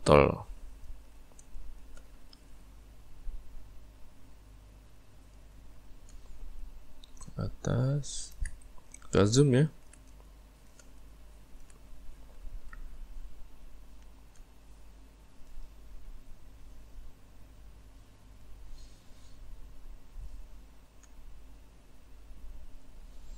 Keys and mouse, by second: 0.5 ctrl+right click, 1.5-4.5 shift+middle drag, 5.3 ctrl+right click, 8.0 ctrl+right click, 9.0 ctrl+middle click, 10.1 middle click, 10.5 middle click, 11.3-13.6 middle drag, 13.6 right click, 15.5 right click, 18.4 right click, 20.2 right click, 22.8 right click.